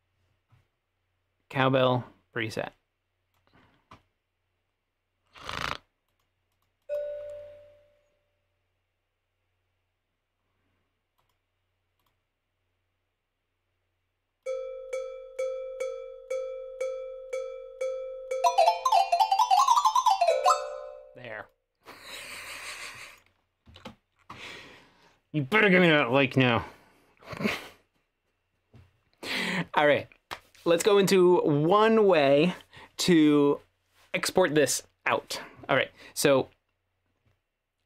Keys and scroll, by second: 23.8 t.